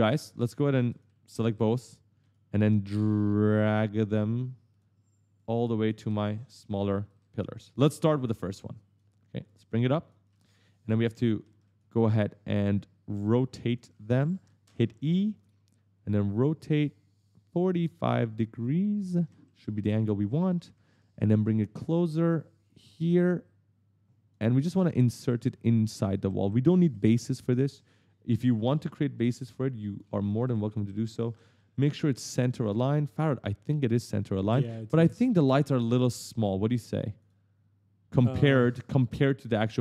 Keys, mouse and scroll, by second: 0.0 click, 0.5 shift+click, 0.6-2.4 typing, 0.8 right click, 3.5 click, 5.2 click, 5.6-7.5 typing, 6.2 right click, 8.1 click, 9.3 click, 9.8-11.3 typing, 10.0 right click, 12.6 click, 13.4-14.5 typing, 13.6 right click, 15.9 click, 18.7-20.4 typing, 19.9 scroll down 1, 20.2 right click, 21.2 click, 24.3 right click, 28.1 click, 30.0 right click, 34.5 a, 35.7 right click, 35.8 q, 37.0 click.